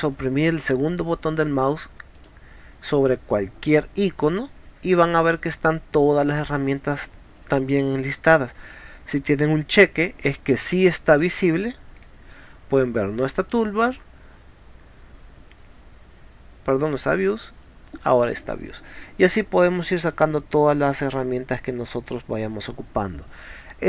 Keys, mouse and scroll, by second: 12.0 click, 17.2 click.